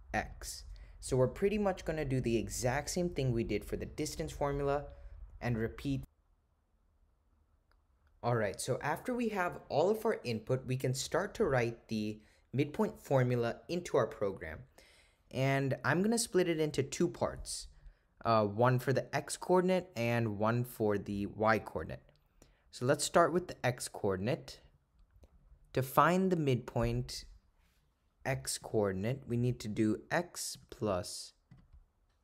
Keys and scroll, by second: 20.3 (.